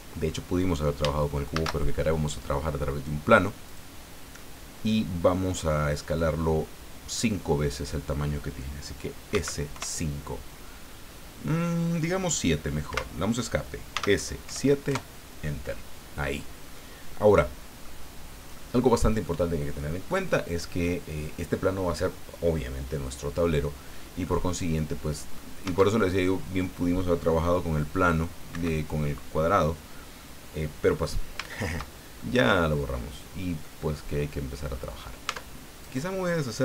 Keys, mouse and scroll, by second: 1.5 shift+a, 3.7 click, 5.5-7.3 middle drag, 7.4 scroll up 2, 9.3 s, 9.7 KP_5, 12.9 Escape, 13.9 s, 14.4 KP_7, 14.9 KP_Enter, 16.0-16.5 scroll down 4, 16.7 click, 16.9-18.0 middle drag, 18.5 scroll down 1, 19.2 middle click, 20.3 scroll up 1, 24.2-25.5 middle drag, 25.7 Tab, 28.5 Escape, 30.2 middle click, 31.3 shift+scroll up 1, 31.5 shift+middle click, 31.9 shift+scroll down 1, 32.2 shift+middle click, 33.6-34.9 middle drag, 35.3 Tab, 35.8 right click.